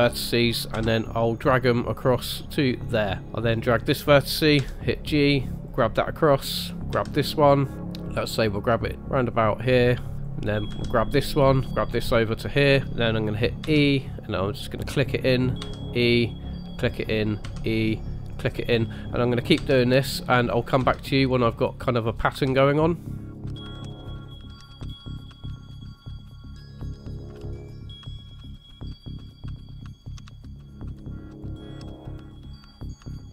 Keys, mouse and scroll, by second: 0.7 g, 3.5 click, 4.5 g, 6.3 click, 6.9 g, 10.2 click, 10.7 g, 13.6 e, 15.6 e, 17.4 e, 19.5 e, 21.1 e, 22.3-33.3 typing, 27.4 ctrl+z, 30.0 scroll down 2, 30.2 shift+middle click.